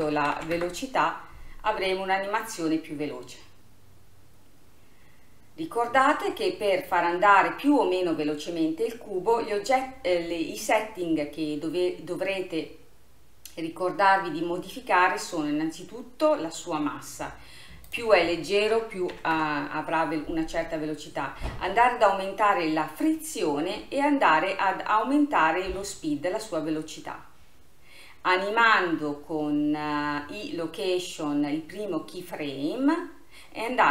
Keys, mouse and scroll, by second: 9.8-13.2 scroll up 5, 15.4-17.9 scroll down 1, 17.9-20.9 drag.